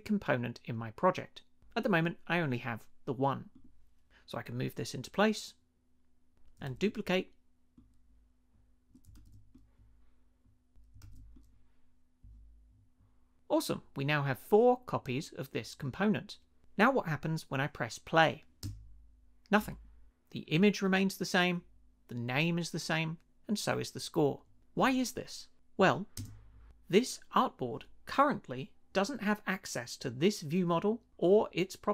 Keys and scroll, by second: 6.7 super+d, 9.2 super+d, 11.0 super+d, 18.6 space, 26.2 space.